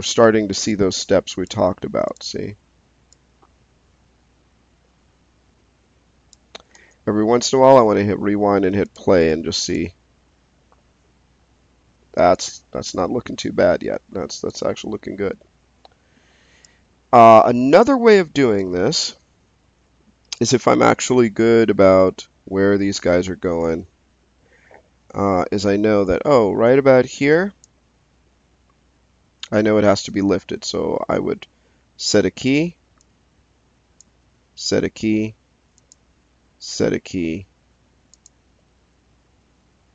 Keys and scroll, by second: 6.7 space, 31.8 s, 34.4 s, 36.6 s.